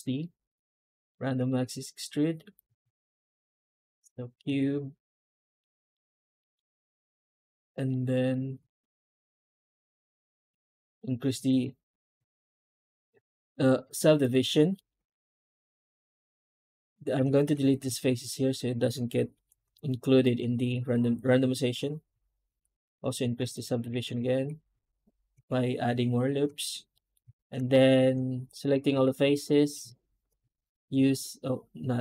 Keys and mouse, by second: 1.0 shift+middle drag, 1.3-1.9 middle drag, 2.5 click, 5.2 Tab, 5.5 middle click, 6.3 shift+middle click, 7.8 middle click, 11.9 shift+h, 12.2 middle drag, 12.5 Tab, 14.6 middle click, 14.8 3, 15.5-15.9 right drag, 16.3 ctrl+right click, 17.7 Tab, 18.2-18.6 middle drag, 19.2 alt+h, 19.6 middle drag, 20.1 click, 20.3 Tab, 20.6 a, 24.0 a, 24.6 Tab, 26.8 middle drag, 27.6 shift+middle click, 28.5 middle drag, 28.8 a, 29.1 Tab, 31.1 Tab.